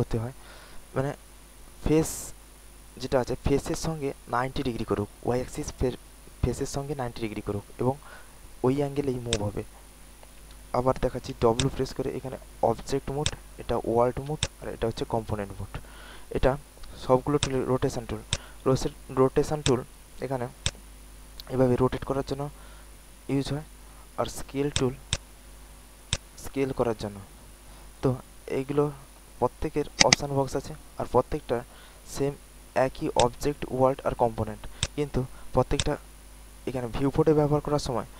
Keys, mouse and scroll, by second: 11.3-11.8 typing, 11.5 click, 13.1 click, 13.6-15.0 typing, 14.3 click, 17.3 click, 18.2 alt+click, 19.5 alt+click, 20.6-23.3 drag, 23.3-28.4 drag, 34.7 alt+click, 35.3 alt+middle click, 35.4 alt+middle click, 35.7 alt+click, 36.1 alt+middle click.